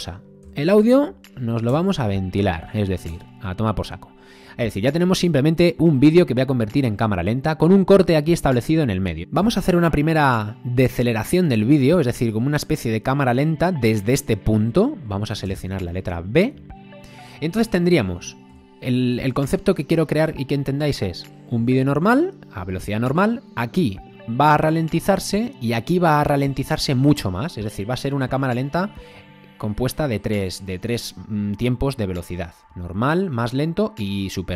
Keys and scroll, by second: 0.4 a, 1.7 BackSpace, 3.1 BackSpace, 15.5 b, 18.5 a.